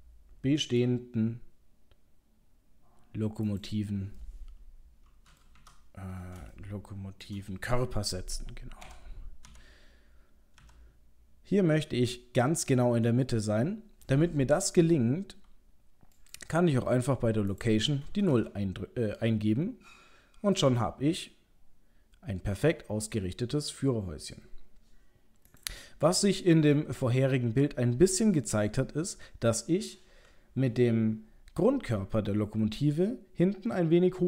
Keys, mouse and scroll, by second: 4.2 middle click, 5.2 middle click, 5.6 KP_7, 6.5 shift+middle click, 6.8 shift+middle click, 7.2 middle click, 8.8 g, 17.5 click, 20.8 middle click, 24.3 middle click, 25.5 click, 26.2 middle click.